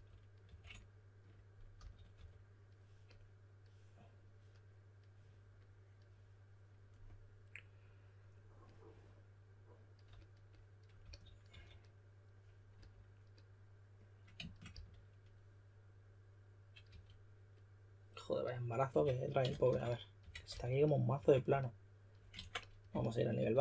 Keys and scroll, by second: 0.0-0.4 typing, 1.7-2.6 typing, 10.7-11.9 typing, 14.6 s, 16.6-17.3 typing, 18.9-21.1 typing, 22.3 super+z, 22.6-23.6 typing.